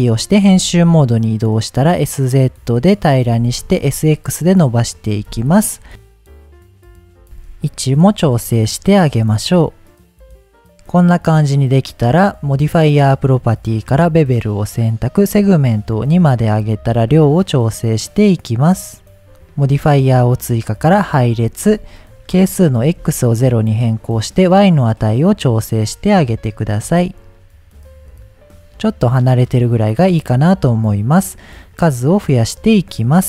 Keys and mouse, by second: 0.5 s, 0.7 z, 3.0 click, 3.3 s, 3.6 x, 4.7 click, 5.9 ctrl+z, 5.9 Tab, 5.9 s, 6.0 y, 6.2 click, 6.3 s, 7.2 Tab, 8.5 KP_1, 9.0 g, 10.4 click, 10.5 middle click, 15.1 click, 16.0 click, 17.0-19.2 shift+drag, 20.8-23.6 drag, 24.3-25.5 drag, 26.3 KP_7, 27.9-29.9 shift+drag, 31.2 click, 31.7 click, 32.1 click.